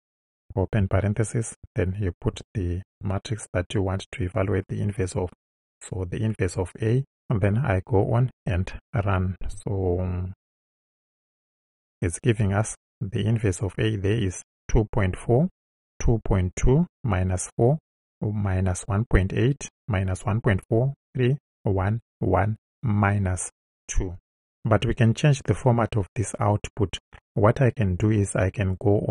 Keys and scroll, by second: 0.8 shift+9, 2.4 shift+a, 5.1 Right.